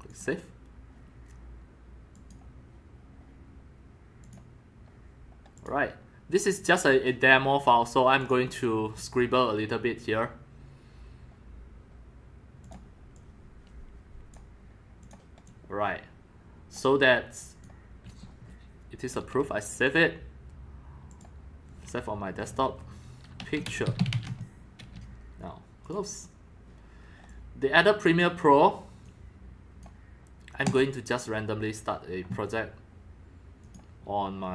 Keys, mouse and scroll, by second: 0.1 click, 0.9-1.9 drag, 2.1 click, 4.2 click, 5.6 click, 8.2 click, 10.0-11.6 drag, 12.6 click, 13.1-14.3 drag, 15.0 click, 15.4-16.7 drag, 17.4 click, 19.8 click, 21.1 click, 22.4 click, 22.6 click, 23.1-26.4 typing, 25.8 click, 26.0 click, 26.7 click, 27.3 click, 29.0-29.8 drag, 30.6 click, 33.6 click.